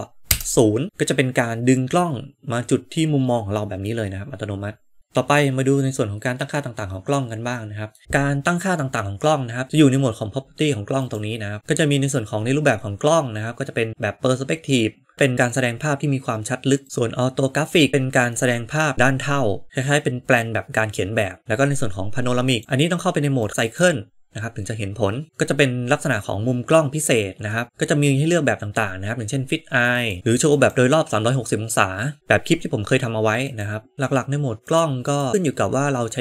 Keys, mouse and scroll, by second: 0.2 ctrl+alt+KP_0, 3.8-7.9 middle drag, 10.9 click, 16.8 click, 21.4-22.6 drag, 23.4-24.6 drag, 30.0-30.7 drag, 33.3-34.0 drag, 34.5 click, 35.0 click.